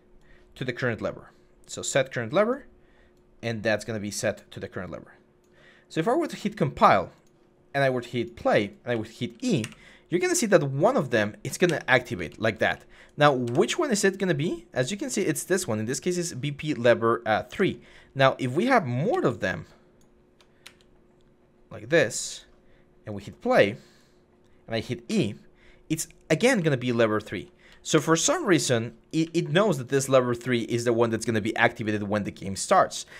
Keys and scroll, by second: 3.2 0, 8.7-9.4 typing, 11.3-12.4 typing, 13.3 Escape, 17.3 Escape, 18.9 ctrl+d, 20.4 ctrl+d, 24.9 e, 26.4-27.4 typing, 27.8 Escape, 30.5 s.